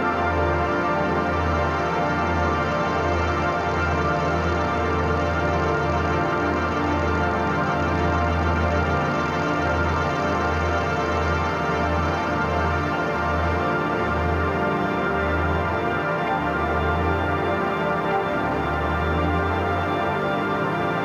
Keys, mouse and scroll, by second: 2.4-10.4 drag, 10.4 ctrl+y, 12.1 click, 16.1 ctrl+=, 16.6-17.5 typing, 16.8 click, 17.6-21.0 drag.